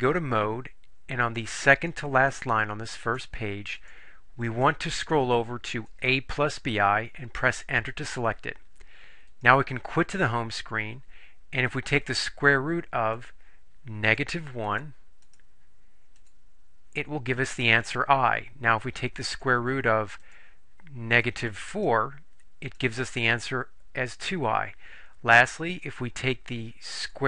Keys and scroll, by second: 1.4 Down, 1.9 Down, 3.2 Down, 3.9 Down, 5.9 Down, 5.9 Right, 7.8 Return, 15.3 1, 16.3 Return, 21.9 4, 22.7 Return.